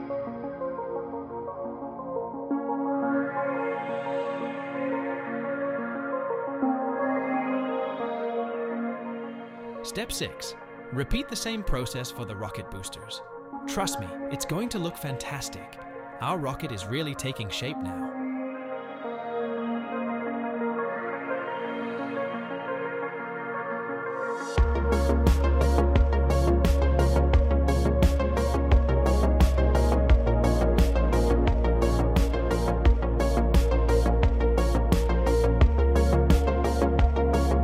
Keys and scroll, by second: 2.1 s, 2.4 x, 2.8 y, 7.6 Tab, 10.2 h, 11.1 shift+a, 14.8 Tab, 15.1 s, 16.1 g, 18.7 g, 19.4 s, 19.9 g, 21.1 s, 21.5 g, 23.8 g, 24.5 x, 26.0-27.5 typing, 29.7 g, 29.9 z, 33.9 e, 35.7 e.